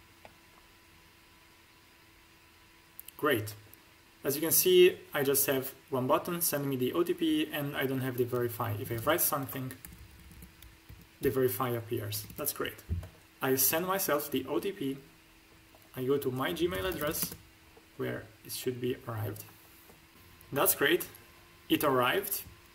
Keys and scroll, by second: 8.7-9.7 typing, 10.8 2, 11.1 3, 12.0 BackSpace, 16.6-17.0 typing, 17.1 Return.